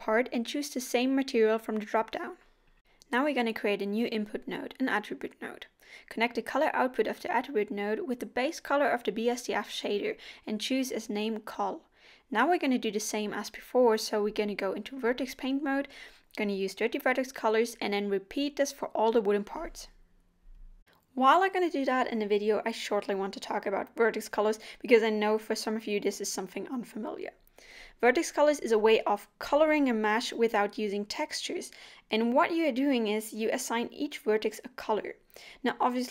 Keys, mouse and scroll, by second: 0.5 click, 2.6 middle click, 3.0 shift+a, 7.9 click, 9.8 click, 12.6 scroll down 1.